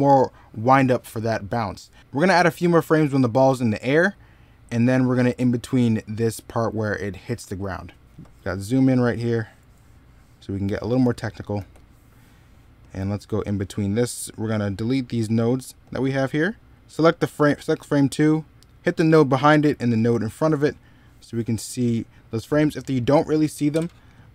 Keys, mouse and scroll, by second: 7.8 middle click, 8.1-8.5 scroll up 1, 8.5-9.1 scroll down 1, 9.1 middle click, 9.4-9.9 scroll up 1, 9.9 middle click, 10.8 e, 11.4 b, 21.3 middle click.